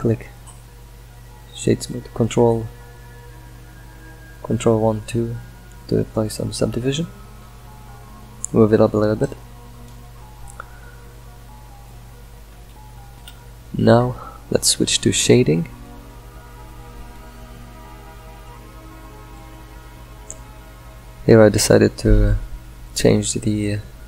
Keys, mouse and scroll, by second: 1.8-3.9 middle drag, 3.9 g, 8.4-11.1 middle drag, 11.1 F5, 11.4-15.4 shift+middle drag, 15.4 click, 16.8 alt+z, 17.7-18.6 middle drag, 19.4 click.